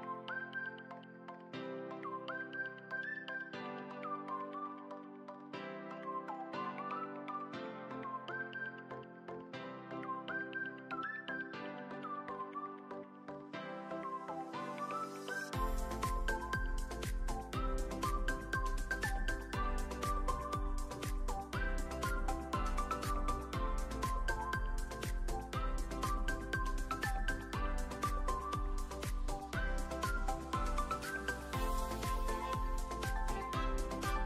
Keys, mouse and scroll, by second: 2.4-4.0 drag, 4.3 drag, 4.6 middle drag, 5.0 click, 5.6-7.8 alt+middle drag, 7.9 `, 10.6 ctrl+s, 12.1 shift+middle click, 12.5-13.3 alt+middle drag, 13.8 `, 14.3 shift+a, 17.5 shift+middle click, 19.5 s, 20.4 g, 21.1 Tab, 21.5 a, 21.6 a, 22.2 e, 22.6 z, 24.2 click, 24.4 Tab, 24.6 s, 26.9 Tab, 27.7 click, 28.6 Tab, 29.5 s, 31.7 Tab, 33.3 Tab, 34.0 g.